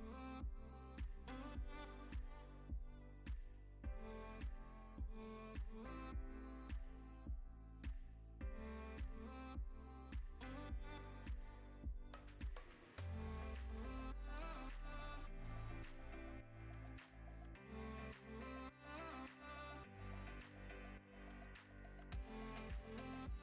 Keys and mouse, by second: 0.1 click, 0.6 click, 1.0 click, 5.0 click, 5.3 click, 6.1 click, 7.3 click, 8.3 click, 11.9 click, 12.4 click, 12.8 click, 13.4 click, 13.7 click, 14.1 ctrl+s, 15.4 click, 15.6 click, 20.5 ctrl+s, 21.1 middle click, 21.4 click, 21.7 shift+s, 22.0 shift+a.